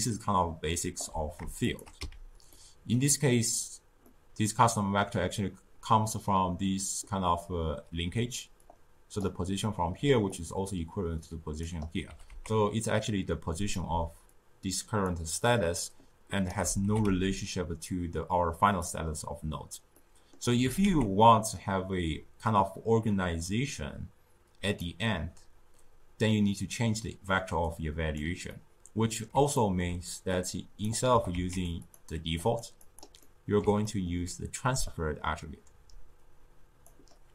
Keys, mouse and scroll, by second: 0.9 d, 1.6 shift+click, 1.9 x, 2.4-7.0 middle drag, 7.9 d, 8.5 d, 8.6-9.1 drag, 9.1-9.9 d, 10.2-12.0 drag, 12.0 g, 13.8 d, 14.2 click, 14.9-15.3 d, 15.4-16.4 right drag, 16.4 d, 16.6 d, 16.7 g, 19.9-20.5 middle drag, 20.5 g, 27.6 click, 28.4-30.2 middle drag, 30.2 click, 31.0 g, 31.7 click, 32.3 click, 32.7 click, 33.1-34.7 middle drag, 34.7-37.3 drag.